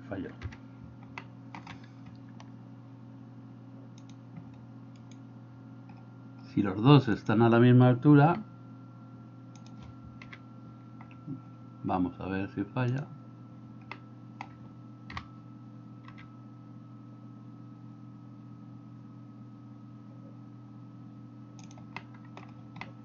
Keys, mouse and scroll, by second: 0.4 KP_3, 1.2 shift+middle click, 5.0-6.0 right drag, 8.3 g, 10.3 KP_7, 14.0 middle click, 15.1 g, 22.0 middle click, 22.9-23.0 middle drag.